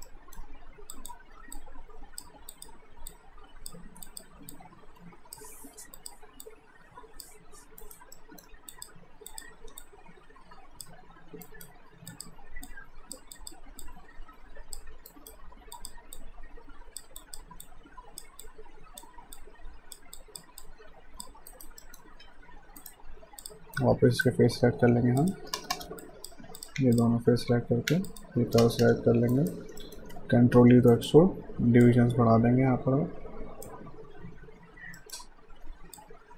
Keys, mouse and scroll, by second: 0.1 alt+middle click, 0.9 click, 7.8 alt+right click, 8.1 alt+middle click, 8.7 click, 11.4 alt+right click, 12.1 click, 15.1 alt+right click, 15.7 click, 21.5 alt+right click, 21.9 alt+middle click, 22.2 q, 22.8 right click, 23.4 click, 23.8 right click, 25.2 click, 25.6 space, 26.0 click, 26.9 click, 28.1 shift+click, 28.6 space, 29.3 alt+right click, 29.8 alt+middle click, 30.5 ctrl+e, 30.9 ctrl+alt+right click, 31.8 click, 35.0 alt+middle click, 35.9 click.